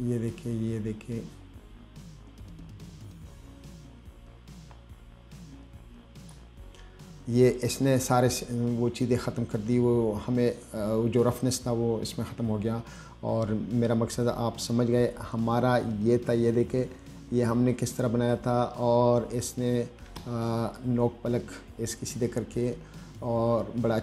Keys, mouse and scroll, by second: 12.7-13.0 scroll down 2, 13.6-13.9 scroll up 2, 16.1-16.7 scroll up 2, 19.4 scroll down 2, 20.7 middle click.